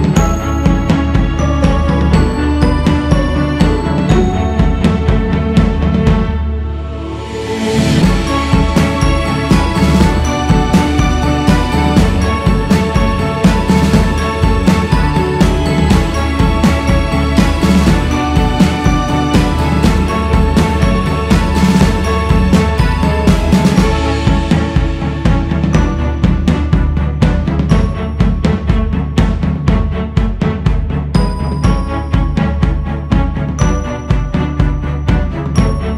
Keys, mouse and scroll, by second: 0.0-1.0 scroll up 5, 1.0 click, 1.9-2.4 scroll down 3, 2.4 ctrl+z, 2.9-3.6 scroll up 3, 3.6-5.3 drag, 5.3 ctrl+z, 6.0 f, 9.0 alt+z, 10.7 alt+z, 12.5 alt+shift+z, 13.5-14.5 scroll up 2, 14.8-15.9 drag, 15.9-17.2 scroll up 3, 17.3 g, 17.9-22.6 drag, 22.6-23.4 scroll up 2, 23.4-33.7 drag, 33.7-34.1 scroll down 9, 34.1 alt+shift+z, 34.9-35.7 scroll down 4, 35.7 alt+shift+z.